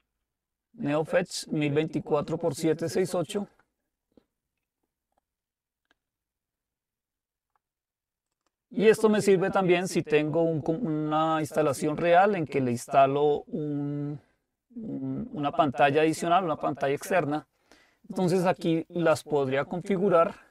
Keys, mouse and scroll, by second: 3.4-4.6 drag, 8.4 click, 18.6 click.